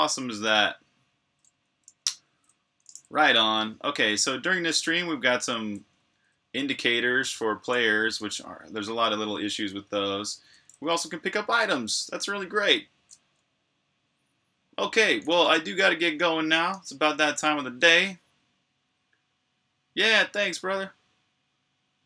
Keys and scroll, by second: 0.0-0.6 typing, 1.9 typing, 7.2-10.0 typing, 11.4-12.2 typing, 14.9 typing, 16.5 super+q.